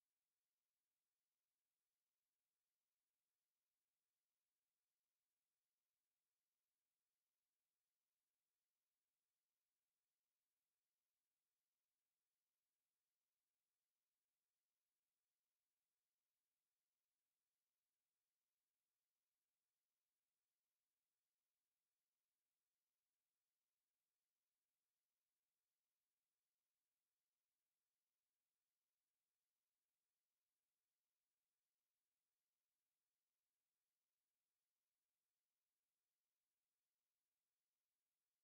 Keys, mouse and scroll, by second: 1.2 click, 4.3 KP_0, 5.6 click, 6.5 click, 7.5 KP_8, 7.8 KP_Enter, 12.7 click, 15.0 click, 19.0 click, 20.0 KP_1, 20.4 KP_Enter, 21.4 click, 22.2 click, 23.0 click, 23.8 click, 25.4-26.4 drag, 26.5-27.8 drag, 28.2 click, 30.3 click, 30.9-33.0 drag, 34.2-35.3 drag, 36.4 click, 38.0-38.4 scroll up 1.